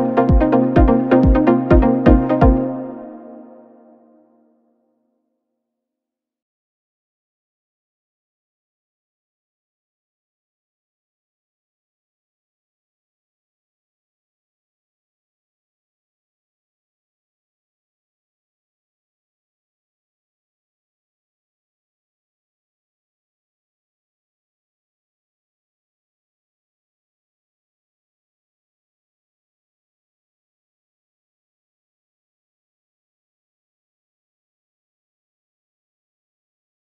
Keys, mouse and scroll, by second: 11.3-12.8 drag, 13.2-13.5 scroll up 6, 14.0-15.1 middle drag, 15.1-33.1 drag, 35.2-36.2 drag, 36.2 scroll down 3.